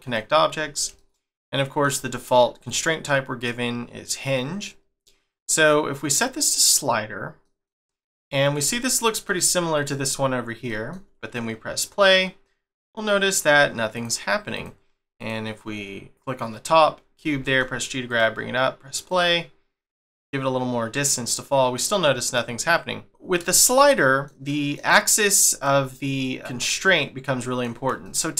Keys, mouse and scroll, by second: 0.0 click, 1.0 shift+middle click, 2.7 click, 7.4 middle click, 7.8 scroll down 1, 8.2-8.7 scroll up 2, 8.7 shift+middle click, 11.7 click, 13.9 click, 14.5 click, 15.2 click, 19.1 click, 19.9 middle click, 21.7 middle click, 23.1 click, 23.5 shift+middle click, 25.5 click, 25.9 scroll up 2, 26.2 middle click, 26.7 middle click, 28.0 shift+middle click.